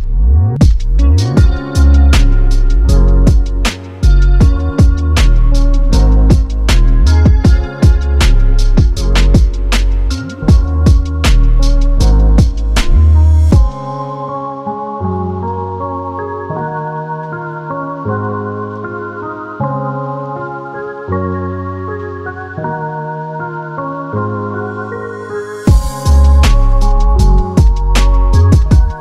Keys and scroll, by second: 18.3 super+c, 21.1 space.